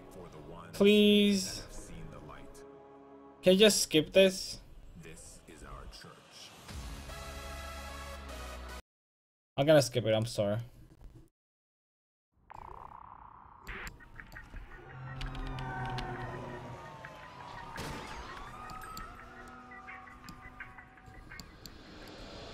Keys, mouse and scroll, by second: 12.6-16.0 middle drag, 15.2 KP_5, 15.4 KP_1, 15.6 KP_5, 16.0 KP_3, 17.6-20.3 middle drag, 19.5 click, 19.5 right click, 20.7 click.